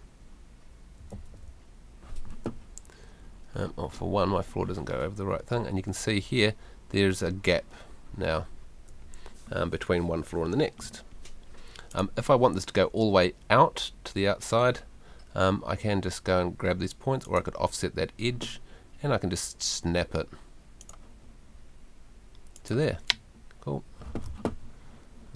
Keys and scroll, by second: 1.1 F3.